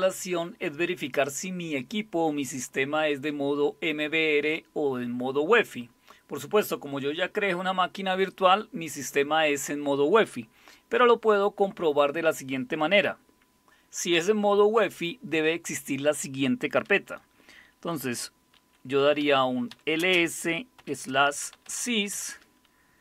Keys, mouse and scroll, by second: 19.2-23.0 typing.